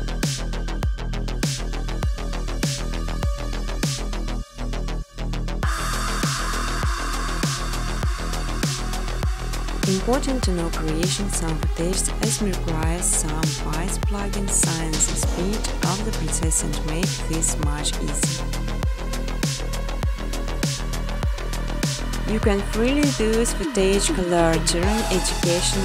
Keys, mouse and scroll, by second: 0.1 click, 0.4-2.9 typing, 3.7 click, 7.1 click, 9.9 click, 11.6 click, 13.3 click, 15.8 click, 19.5 click, 20.7 click, 24.4 click, 25.2 click.